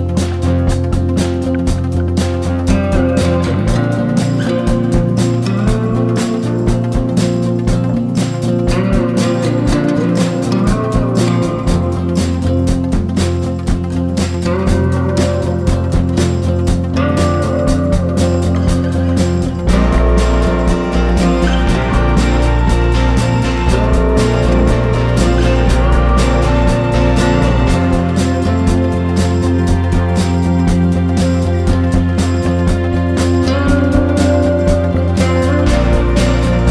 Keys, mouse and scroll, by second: 1.4 click, 1.9 click, 2.6 alt+click, 3.3 alt+shift+click, 3.8 alt+click, 4.1 alt+click, 4.7 alt+shift+click, 5.3 alt+shift+click, 5.9 alt+shift+click, 6.3 alt+shift+click, 6.8 alt+shift+click, 8.9 click, 10.7 ctrl+e, 15.6 click, 16.2 click, 17.4 click, 17.8 alt+shift+click, 18.2 click, 18.6 alt+shift+click, 19.1 alt+shift+click, 19.5 alt+shift+click, 20.6 click, 21.5 click, 22.3 alt+shift+click, 22.8 click, 26.3 ctrl+f, 29.6 KP_1, 30.8 shift+z, 31.1 scroll down 2, 31.4 scroll up 1, 32.0 scroll down 1, 34.9 shift+click, 36.1-36.7 scroll up 4.